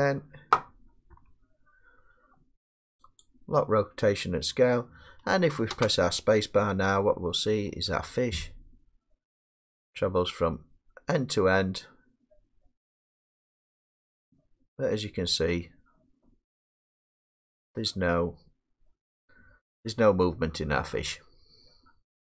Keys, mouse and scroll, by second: 1.1 i, 5.7 space, 21.2-22.3 middle drag, 21.2-22.3 scroll up 5.